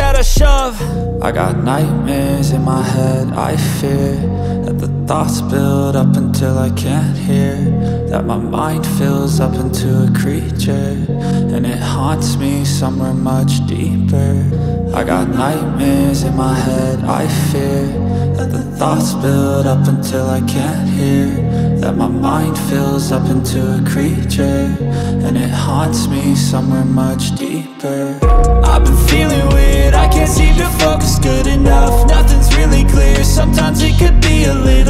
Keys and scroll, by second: 0.7 4, 4.4-7.7 typing, 9.0-9.7 typing, 10.4 ctrl+z, 12.3-17.5 typing, 19.3 typing, 27.9-29.3 typing, 31.5 BackSpace, 31.9 BackSpace, 33.4-34.8 typing.